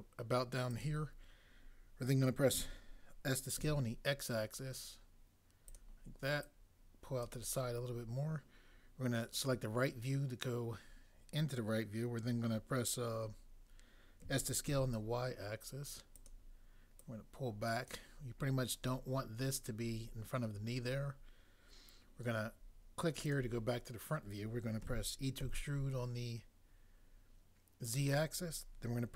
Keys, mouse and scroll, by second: 2.6 s, 3.6 x, 14.2-14.7 typing, 24.9 e, 25.4 z.